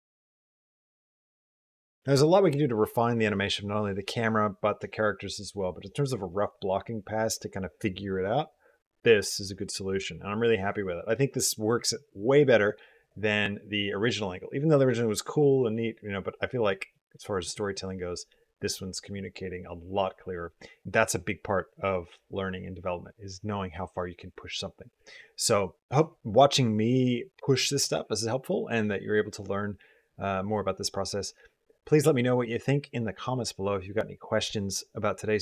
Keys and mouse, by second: 2.0 space, 12.8 click, 16.6 middle click, 17.3 click.